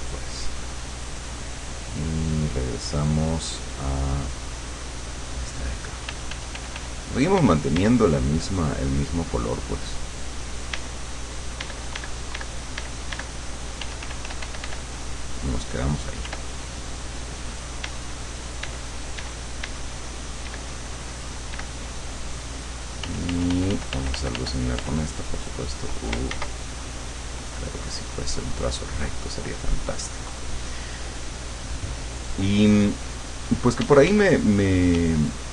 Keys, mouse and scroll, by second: 3.7 click, 5.1 click, 6.1 f, 7.8 d, 8.0 click, 9.5 click, 10.9 d, 11.1-13.3 drag, 11.7 d, 13.9 f, 14.9 click, 16.3 f, 16.6 click, 17.9 d, 18.3-20.4 drag, 18.7 d, 20.5 d, 20.6 click, 21.1-22.2 drag, 21.6 d, 23.1 f, 25.1 click, 26.4 ctrl+z, 26.9 ctrl+click, 28.1 click, 28.6 click, 30.3 click, 31.6 click, 33.9 d, 34.4 click, 35.0 d, 35.2-35.5 drag.